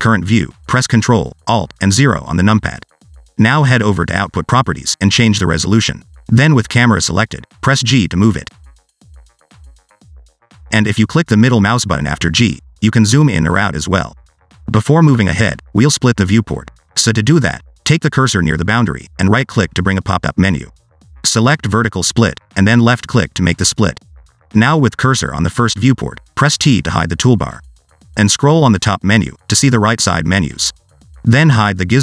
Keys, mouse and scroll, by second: 0.2 scroll up 1, 0.4 middle click, 0.7 scroll up 1, 0.9 middle click, 2.6 ctrl+alt+KP_0, 4.1 click, 4.6 click, 7.5 click, 7.9 g, 10.1 g, 11.1 scroll down 1, 11.8 g, 13.2 g, 14.2 g, 21.8 right click, 26.4 click, 28.0 t, 30.3-32.0 scroll down 7.